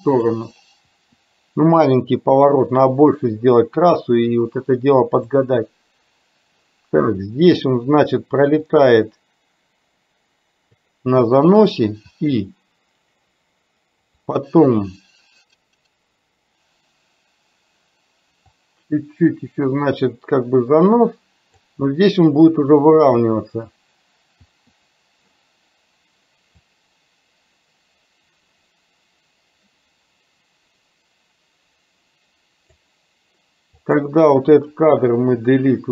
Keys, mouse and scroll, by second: 1.0 i, 5.3-7.7 drag, 8.7-11.0 drag, 12.1 i, 14.3 click, 18.7-21.7 drag, 22.7 i, 24.6 i, 26.7-32.8 drag, 33.8 click, 35.1 Delete.